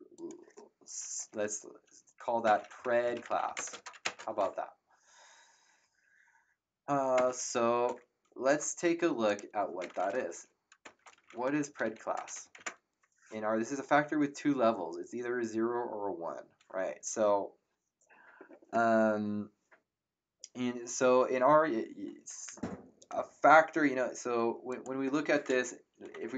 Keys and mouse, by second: 0.1 click, 2.2-4.5 typing, 7.1 Return, 9.2 click, 9.4-12.7 typing, 24.7 click, 25.8-26.3 typing.